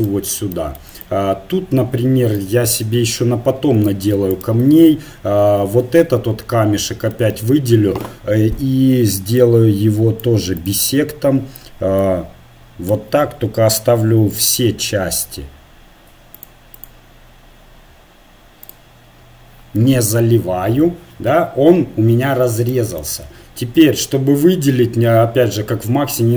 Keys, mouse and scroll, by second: 2.6 KP_1, 4.3-6.1 right drag, 4.7 Tab, 7.1 a, 7.6 a, 9.4-12.6 drag, 14.3-16.1 drag, 16.1 middle click, 16.4-18.6 drag, 19.4-20.5 drag, 22.7-23.8 middle drag, 23.8 a, 24.3-26.3 middle drag.